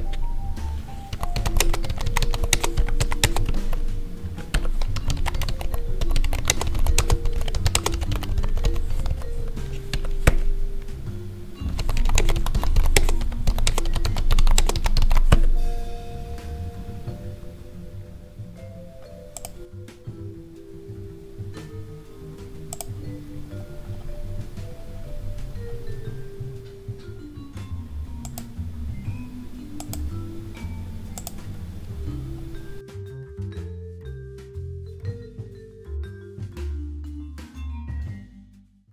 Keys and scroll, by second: 1.5 space, 2.4 space, 3.1 space, 6.4 space, 6.9 space, 7.6 space, 12.1 space, 12.8 space, 13.5 space, 14.5 space.